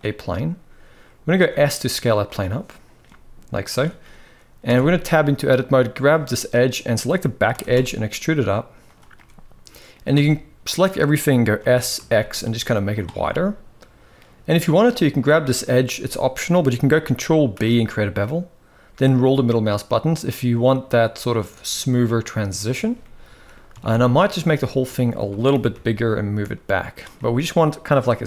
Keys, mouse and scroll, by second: 1.1 s, 2.8-3.2 middle drag, 4.4 Tab, 5.5 click, 7.2 e, 8.9 middle click, 9.9 a, 11.4 s, 13.0 middle click, 14.8 click, 17.3 ctrl+b, 22.7 middle click, 23.4 a, 24.2 s, 25.2 g, 26.9-28.2 middle drag.